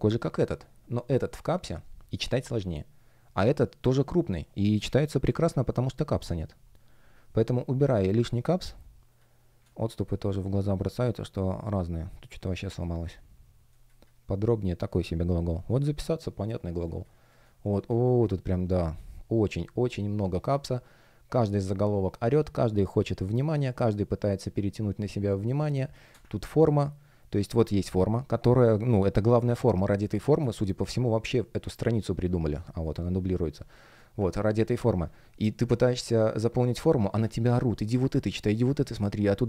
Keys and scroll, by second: 8.2 space, 13.6 space, 16.7 space, 25.6 space, 29.2 space, 32.2 space, 36.6 space, 38.7 space.